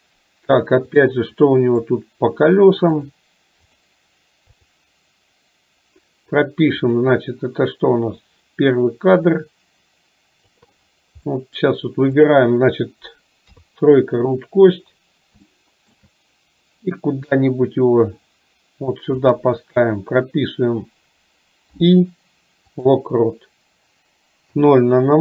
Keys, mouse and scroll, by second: 1.6 middle click, 3.1 click, 4.6 click, 6.8 click, 8.2-10.6 drag, 11.3 middle click, 12.2 click, 15.5 shift+middle click, 16.9-19.3 drag.